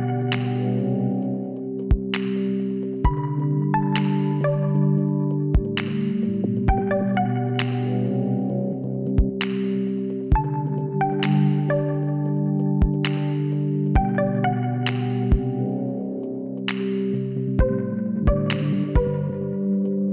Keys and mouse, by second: 0.2-2.5 middle drag, 0.5 z, 8.9-10.4 middle drag, 10.4 KP_7, 12.0-13.8 drag, 12.7 shift+a, 15.1 s, 18.7-20.1 drag, 19.2-20.1 middle drag.